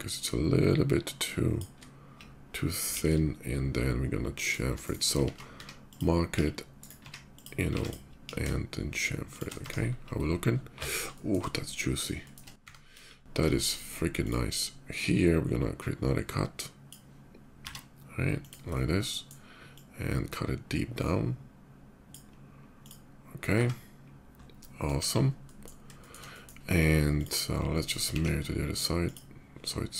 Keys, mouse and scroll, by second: 2.5 ctrl+b, 4.2 shift+click, 4.6 shift+right click, 5.0 ctrl+z, 5.3 q, 5.5 ctrl+z, 5.6 click, 6.1 ctrl+b, 6.5 right click, 6.9 q, 7.1 click, 7.6 click, 8.0 ctrl+b, 9.1 shift+click, 9.1 q, 9.3 Tab, 10.9 shift+middle click, 11.4 shift+middle click, 11.9 shift+middle click, 12.5-12.9 middle drag, 12.9 KP_5, 13.2 shift+middle click, 13.9 click, 14.7-16.6 drag, 17.4 b, 18.2 click, 18.5-18.9 middle drag, 19.5-21.9 drag, 22.1 middle click, 22.5 click, 24.1 scroll down 1, 24.3-24.6 middle drag, 24.7 KP_5, 25.1 middle drag, 25.7 shift+middle click, 26.1 shift+middle click, 26.8 click, 27.4-27.8 shift+middle drag, 28.8 alt+x, 28.8 click, 29.8 middle click.